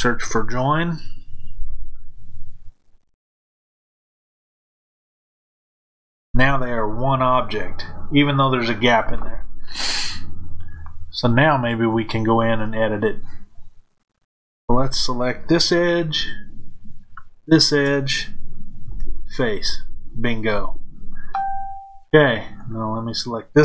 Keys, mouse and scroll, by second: 16.8 shift+click, 18.8 f, 22.5 click.